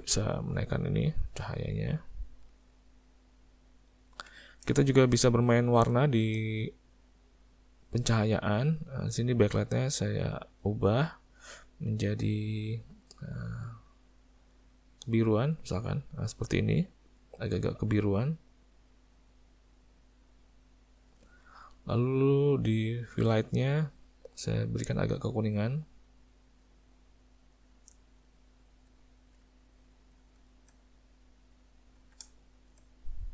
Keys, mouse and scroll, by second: 0.5 click, 2.5 click, 3.1 click, 4.7 shift+middle click, 5.4 middle click, 6.1 shift+middle click, 6.7 middle click, 10.2 click, 11.1 click, 22.3 click, 24.3 click, 29.0 ctrl+middle click, 30.3 shift+middle click, 31.1 middle click, 32.3 shift+middle click, 33.0 middle click.